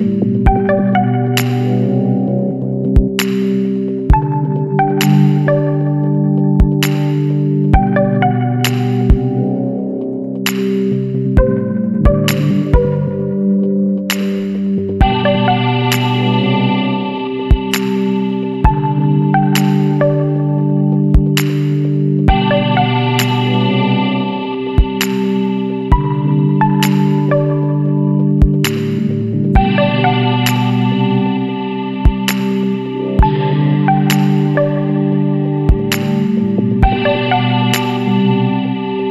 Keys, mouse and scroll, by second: 0.4-10.5 middle drag, 0.6-5.5 drag, 1.2-3.2 right drag, 10.5-13.0 drag, 10.5-13.0 right drag, 13.4-14.0 scroll up 4, 14.6 Left, 16.6 Left, 19.9-20.7 scroll down 2, 21.0 scroll up 1, 21.6-23.0 middle drag, 21.8 click, 26.2 click, 28.2 click, 31.0 click, 32.2 ctrl+KP_Subtract, 32.7 KP_1, 33.0 KP_7, 33.4 KP_6, 35.9-36.6 drag, 36.9 click, 38.5 click, 39.0 scroll down 1.